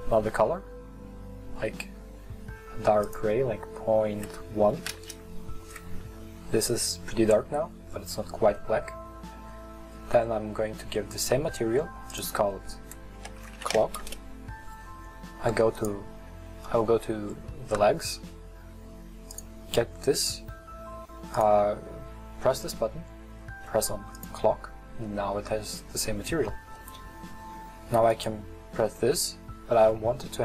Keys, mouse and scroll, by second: 7.1-7.7 middle drag, 7.7-8.6 scroll down 8, 8.6-9.4 middle drag, 9.4 scroll down 1, 10.5-10.9 scroll up 1, 10.9-14.0 middle drag, 14.0-15.8 drag, 15.8 right click, 17.4-17.9 scroll up 5, 17.9-18.9 scroll down 2, 18.9-21.6 scroll down 1, 21.6 click, 24.4-25.1 drag, 25.1-26.5 middle drag, 26.5-26.8 scroll down 1, 26.8-28.1 middle drag, 28.1 right click.